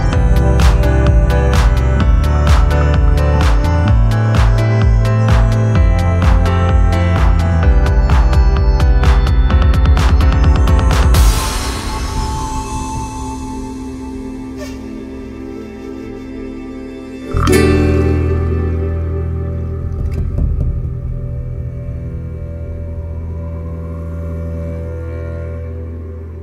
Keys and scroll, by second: 18.5 shift+y, 18.8 shift+i, 20.0 7.